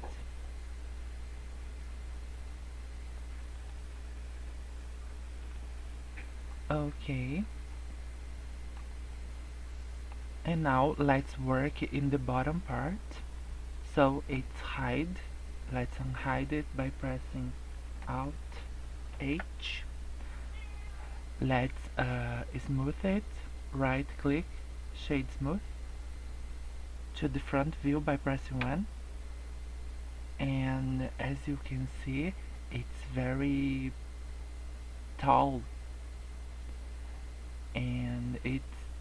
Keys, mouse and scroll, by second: 6.5-6.9 scroll up 3, 6.9 scroll down 4, 7.2 scroll up 2, 7.6 middle click, 8.8 scroll down 2, 9.0 middle click, 10.1 scroll up 1, 10.5 scroll down 3, 10.8 middle click, 11.3 scroll up 1, 12.9 scroll down 1, 13.1-13.4 scroll up 3, 14.0 scroll down 2, 14.4 scroll up 2, 15.6 middle click, 19.0 alt+h, 19.7 scroll down 1, 20.0 scroll up 1, 23.7 right click, 28.5 KP_1, 36.9 scroll up 2, 37.2-38.0 scroll down 3, 37.6-38.4 scroll up 2, 38.5-39.0 scroll down 2.